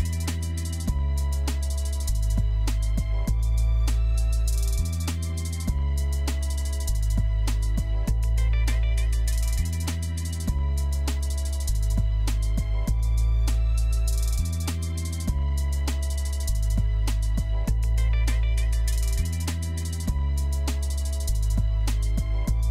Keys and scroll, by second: 8.1-8.9 typing.